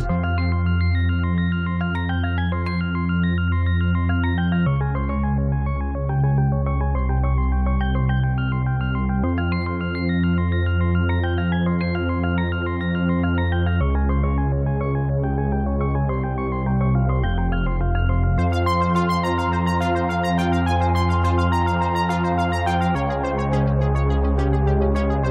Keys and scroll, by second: 10.5 space.